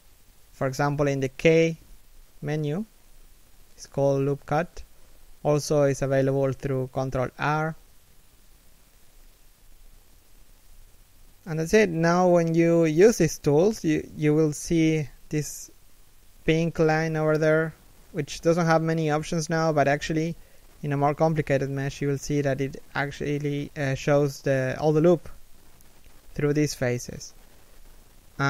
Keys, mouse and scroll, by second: 0.5 k, 9.8 ctrl+r.